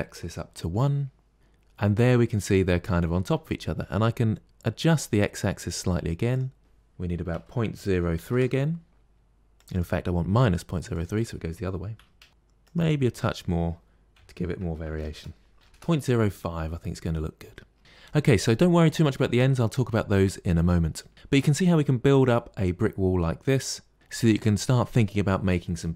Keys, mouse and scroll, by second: 6.2-9.0 drag, 9.4-12.3 drag, 12.3 middle click, 12.5-16.3 drag, 16.6-17.8 middle drag, 22.2-23.9 middle drag.